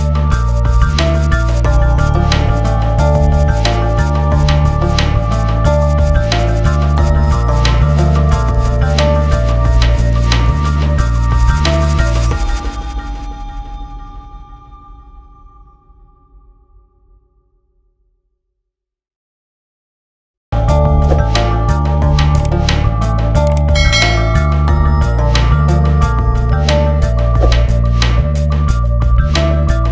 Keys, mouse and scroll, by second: 0.5 scroll down 1, 0.9 click, 2.2 scroll up 1, 3.2 click, 4.2 scroll up 1, 6.2-10.0 drag, 10.0-12.5 drag, 12.5-14.5 drag, 13.4-14.1 typing, 14.5-15.1 scroll down 1, 15.6 shift+click, 17.9 a, 20.1 click, 21.7 F4, 23.1 click, 25.2 ctrl+g, 26.4-29.4 drag, 29.4-29.9 drag.